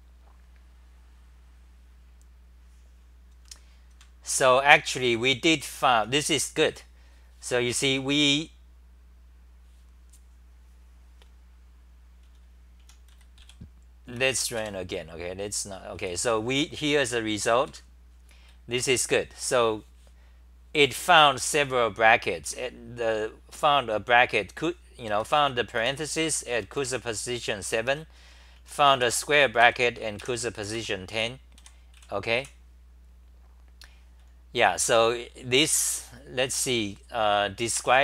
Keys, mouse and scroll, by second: 3.3 super+=, 4.0 super+=, 5.5 t, 5.8 t, 12.0-13.9 typing, 16.0 w, 17.7 super+=, 18.5 d, 18.7 d, 22.4 2, 25.2 ctrl+g, 25.4 t, 25.8 2, 26.2 ctrl+g, 26.5 c, 26.8 2, 27.9 ctrl+g, 27.9-32.4 typing, 29.6 ctrl+g, 30.7 ctrl+g, 34.5 c.